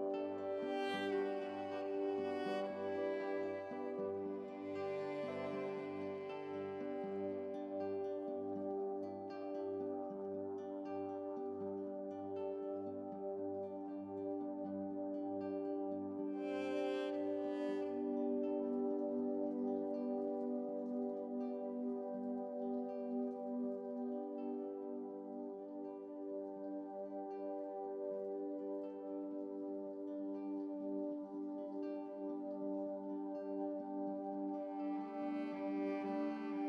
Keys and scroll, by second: 23.7 ctrl+z, 29.0 ctrl+z, 33.4 ctrl+z.